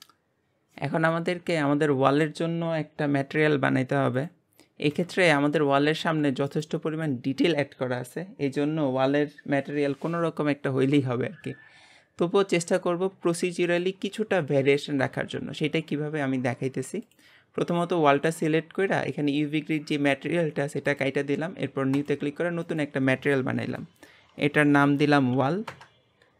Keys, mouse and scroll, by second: 0.0-4.2 shift+middle drag, 4.2-5.1 drag, 5.3-6.0 shift+middle drag, 6.0 g, 13.4-17.1 shift+middle drag, 17.1 click, 20.9-25.8 drag, 25.8 l.